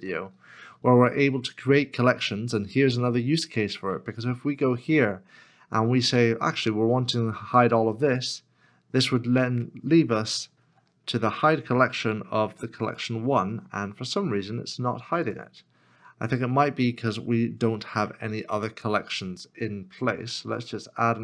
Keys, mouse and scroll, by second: 10.5 ctrl+h, 18.0 ctrl+h.